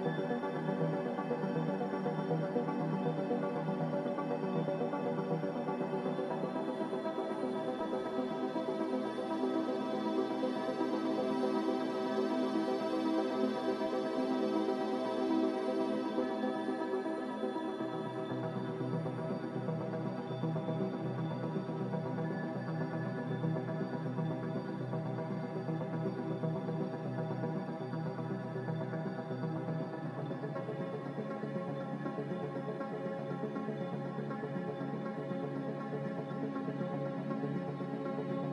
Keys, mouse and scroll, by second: 9.2 Delete, 11.8 Delete, 29.5 Delete.